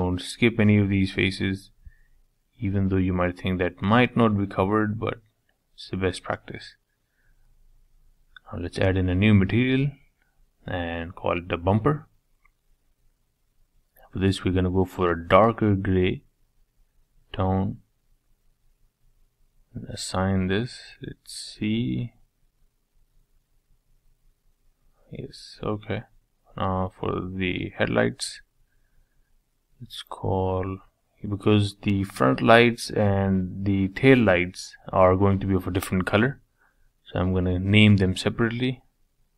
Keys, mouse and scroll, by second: 0.3 middle click, 0.7 middle click, 1.4 shift+click, 1.7 shift+click, 2.0-2.9 scroll down 2, 2.9 shift+click, 3.3-4.4 shift+middle drag, 4.4 shift+click, 4.7 scroll down 3, 4.9-6.9 middle drag, 6.9-10.8 drag, 11.9 middle click, 12.9 click, 14.2 click, 17.0-19.6 drag, 19.6 middle click, 20.1-20.5 scroll down 2, 20.5 middle click, 20.9-21.4 scroll up 2, 21.4-25.8 shift+middle drag, 22.1-22.9 scroll up 1, 22.9 click, 25.8-32.6 drag, 36.7 click.